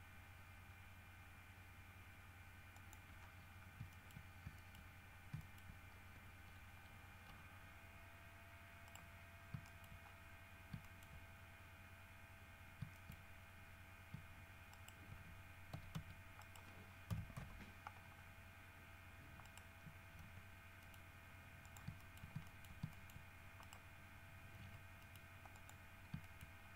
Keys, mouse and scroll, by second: 2.9 click, 3.4-4.0 scroll down 5, 4.1 shift+middle click, 4.4 shift+scroll up 2, 4.8 shift+middle click, 5.6 shift+middle click, 6.9 scroll up 2, 7.5 scroll down 2, 8.2-9.0 scroll up 2, 9.0 middle click, 9.8 shift+middle click, 10.2-10.5 shift+scroll down 1, 11.0 shift+middle click, 11.9 scroll up 1, 12.8 scroll up 1, 13.1 shift+middle click, 14.9 shift+right click, 15.9 w, 16.1 s, 16.6 right click, 17.3 KP_7, 17.5 KP_Decimal, 18.3-18.6 scroll up 1, 19.6 right click, 20.4 g, 21.0 middle click, 21.8 shift+middle click, 22.6 shift+middle click, 23.1 shift+middle click, 23.8 shift+right click, 24.8 g, 25.2 middle click, 25.7 click, 26.4 shift+middle click.